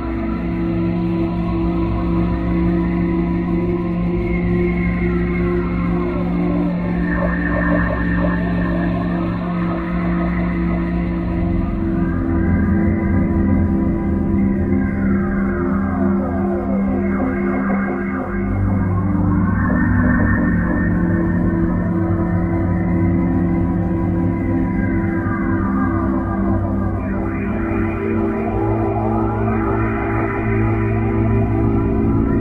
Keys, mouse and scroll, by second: 0.9 n, 1.4-2.1 scroll up 6, 3.7 scroll up 3, 4.2-5.3 scroll up 16, 7.8 t, 10.0 n, 12.2 t, 14.2 click, 15.9 click, 18.1 click, 19.7 click, 21.5 click, 23.6 click, 25.8 click, 28.5 click, 29.8 click, 31.9 click.